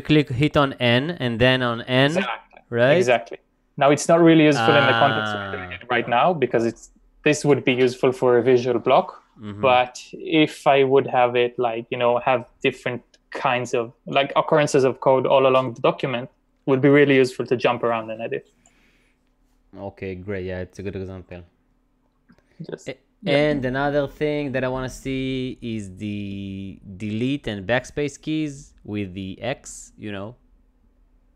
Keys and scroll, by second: 3.2-5.2 typing, 17.5-18.9 typing.